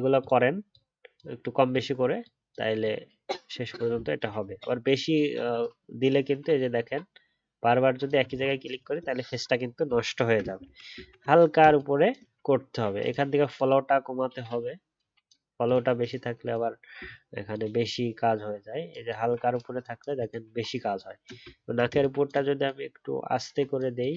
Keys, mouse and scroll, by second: 3.9 alt+scroll down 1, 4.2 alt+scroll up 1, 8.3 alt+scroll up 1, 8.7 alt+scroll down 1, 10.0 alt+scroll down 1, 10.0 alt+scroll up 1, 10.6 ctrl+z, 10.9 ctrl+z, 17.0-20.4 alt+scroll up 1, 21.5-22.1 alt+scroll up 3.